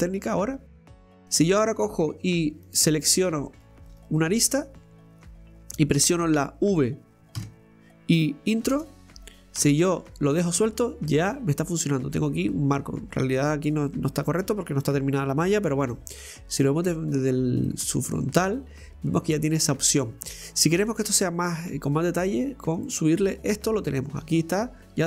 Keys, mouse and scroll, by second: 0.9 right click, 2.6 click, 3.5 right click, 3.9 alt+shift+right click, 4.1 alt+shift+right click, 7.4 v, 9.6 Tab, 10.6-17.1 middle drag, 17.1-17.7 scroll up 2, 17.7-22.8 middle drag, 22.8 click, 23.8-24.4 middle drag, 24.4 scroll down 1, 24.7-25.0 middle drag.